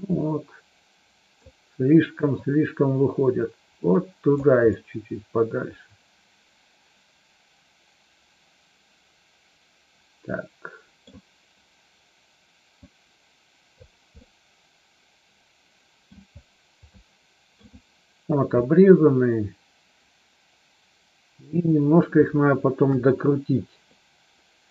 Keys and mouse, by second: 2.3-4.3 drag, 4.6-11.0 middle drag, 13.0 click, 14.2-16.1 middle drag, 17.0 shift+middle click, 18.6-21.6 middle drag, 22.8 KP_1.